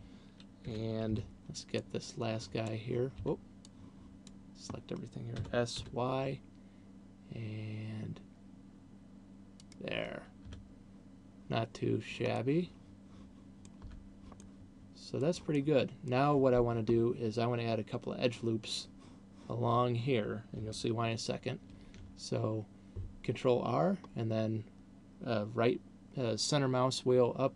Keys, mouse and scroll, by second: 1.1 a, 1.4 b, 3.4 b, 5.9 s, 10.1 click, 10.9 Tab, 12.1 scroll down 2, 12.9 middle click, 14.1 Tab, 14.9 middle click, 15.9 middle click, 21.9 ctrl+r.